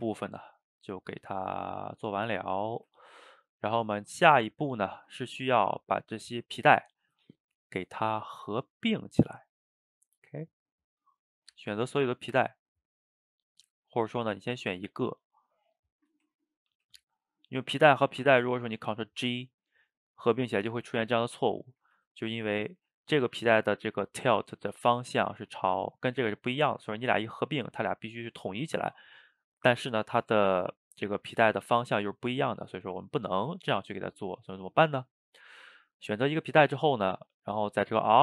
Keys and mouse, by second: 2.7 shift+right click, 3.0-3.5 ctrl+middle drag, 3.5 click, 4.5 shift+click, 7.7-11.1 middle drag, 11.1 shift+click, 11.8 shift+click, 13.0-14.0 middle drag, 14.0 click, 14.2-14.6 shift+middle drag, 14.6 shift+right click, 14.8-16.0 ctrl+middle drag, 16.0 shift+click, 16.7 ctrl+j, 18.3-22.0 middle drag, 22.0 ctrl+z, 23.1 click, 23.8 click, 24.8-26.5 middle drag, 26.5 click, 30.6-31.7 middle drag, 31.7 a, 31.8 a, 32.0-34.3 middle drag, 34.3 click, 37.3-38.2 drag.